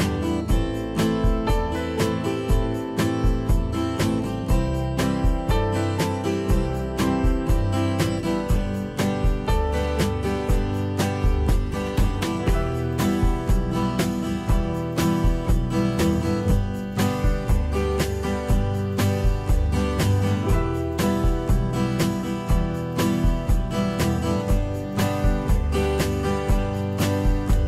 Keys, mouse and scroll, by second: 1.7 ctrl+a.